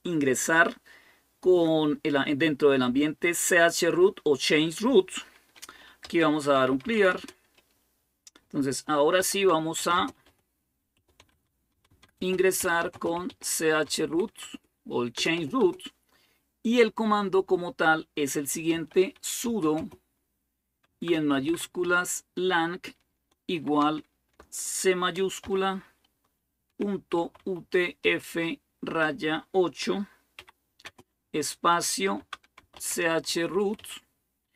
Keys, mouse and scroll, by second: 5.6-7.2 typing, 8.7-15.4 typing, 18.3-21.8 typing, 20.7 Caps_Lock, 23.4 typing, 25.2 typing, 26.5-28.6 typing, 30.2-30.6 typing, 32.0-34.5 typing.